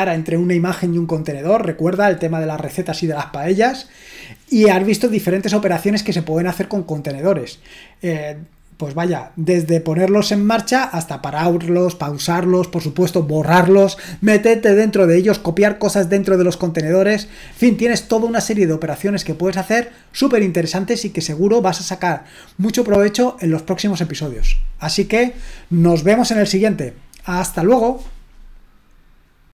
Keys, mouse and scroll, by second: 29.4 click.